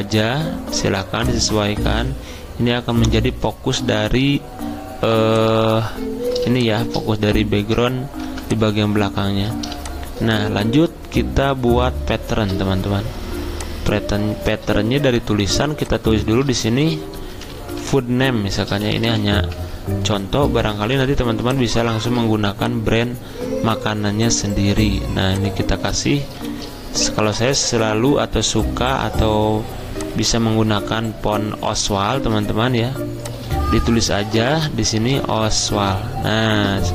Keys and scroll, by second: 8.2 v, 16.4-19.7 typing, 25.5-28.2 typing, 32.2 ctrl+t, 34.8-36.2 typing.